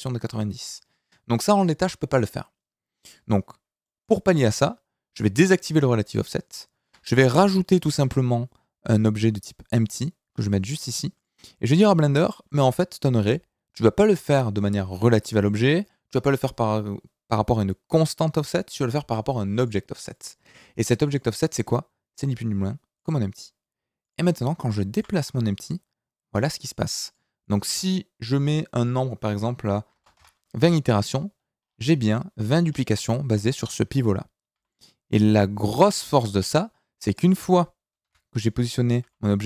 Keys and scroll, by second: 6.8 KP_1, 7.8 shift+a, 24.9 g, 34.5 g, 38.0 KP_7, 39.0 g.